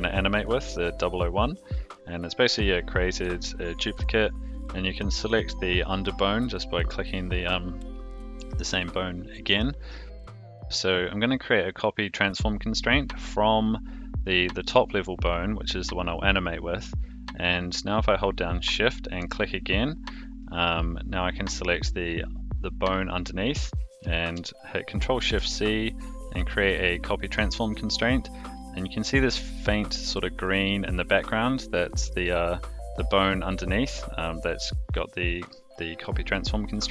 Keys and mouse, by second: 1.6 click, 3.1 click, 4.3 click, 6.3 click, 19.2 shift+click, 25.0 ctrl+shift+c, 35.3 click.